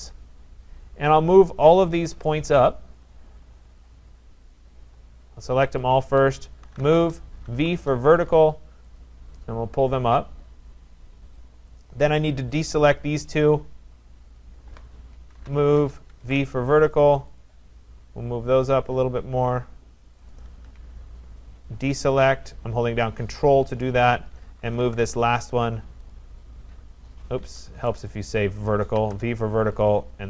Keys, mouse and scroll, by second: 1.1 click, 2.2 shift+click, 3.0 shift+click, 3.8 click, 4.6 click, 5.9 shift+click, 6.4-9.1 typing, 9.0 click, 11.4 click, 12.6 ctrl+click, 14.4 click, 15.1-16.6 typing, 17.4 click, 20.0-20.7 typing, 20.3 click, 22.1 ctrl+click, 23.7 click, 24.4-25.4 typing, 26.1 click, 27.5 Escape, 28.0 right click, 28.7-30.2 typing, 29.8 click.